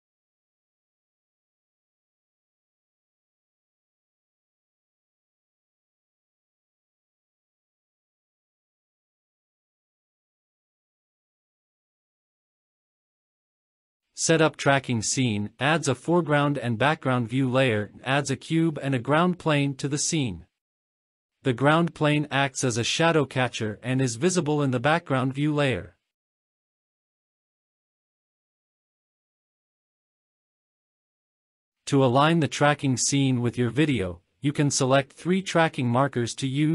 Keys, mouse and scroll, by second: 0.8-1.6 scroll up 5, 4.4 scroll down 3, 5.2 space, 6.3 click, 7.8-8.2 drag, 8.8-10.1 scroll down 10, 11.7 click, 14.4 click, 16.5-17.2 scroll down 3, 16.9-17.3 middle drag, 17.6-18.7 scroll down 4, 18.7-19.7 scroll up 3, 20.7 a, 21.5 click, 23.3-23.6 scroll down 3, 23.8 shift+middle drag, 24.3-25.5 scroll down 6, 25.5-25.9 scroll up 3, 25.9-26.2 scroll down 2, 26.2-28.0 middle drag, 28.2 scroll down 1, 28.5 shift+middle drag, 29.9-32.0 drag, 33.4-33.7 scroll down 2, 33.7-34.6 middle drag, 34.8-36.2 scroll up 4, 36.3 scroll down 2.